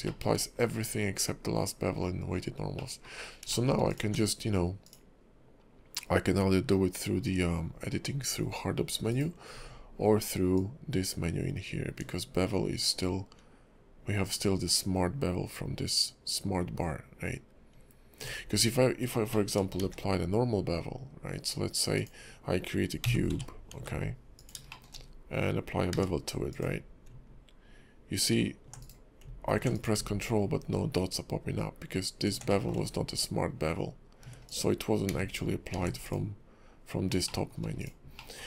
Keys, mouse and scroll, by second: 0.0 shift+middle click, 0.5-1.8 scroll down 3, 1.8-2.6 scroll up 2, 2.8 middle click, 3.2 scroll up 2, 3.6 shift+middle click, 3.9 click, 4.0 q, 10.5 ctrl+click, 18.4-19.3 scroll down 7, 19.3 middle click, 19.8 shift+a, 23.0 g, 24.7 shift+middle click, 25.0-25.9 scroll up 3, 25.9 q, 29.7 click, 32.5 middle click, 34.4 click, 35.1 x, 35.7 x, 37.2 shift+middle click, 37.8 click, 38.2 middle click.